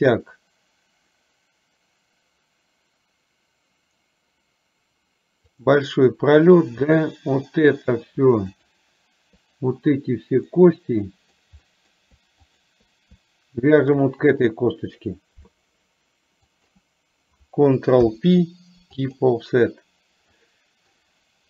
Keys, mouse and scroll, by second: 8.6 shift+click, 10.6-11.6 middle drag, 11.7 middle click, 12.7 shift+click, 13.9 shift+click, 16.7 shift+click, 18.1 ctrl+p, 20.4 middle click.